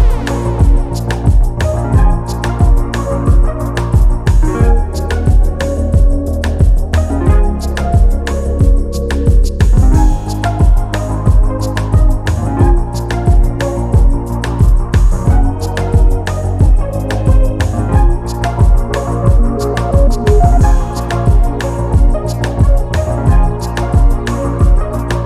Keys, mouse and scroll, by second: 0.4-1.9 ctrl+drag, 3.9 shift+click, 5.1 ctrl+KP_Subtract, 7.6 shift+click, 9.2 ctrl+KP_Add, 11.2 ctrl+y, 12.6 ctrl+click, 13.3-14.0 ctrl+scroll up 2, 16.0 Delete, 16.9-17.5 ctrl+scroll down 2, 18.4 click, 20.8 click, 22.2 click, 23.6 click, 24.9 click.